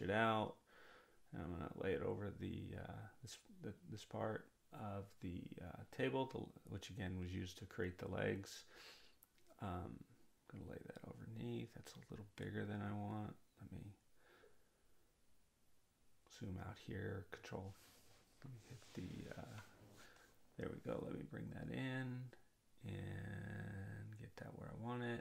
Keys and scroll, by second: 15.7 [, 18.2 ctrl+-.